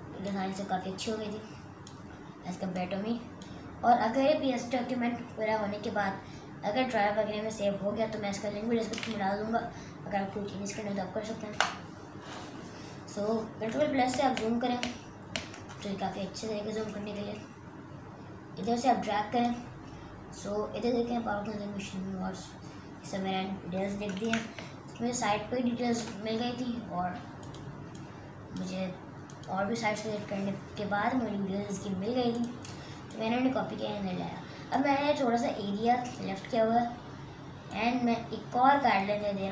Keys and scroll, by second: 11.5 Return, 14.3 ctrl+KP_Add, 14.9 ctrl+KP_Add, 15.3 ctrl+KP_Add, 24.6 ctrl+KP_Subtract, 25.2 ctrl+KP_Subtract.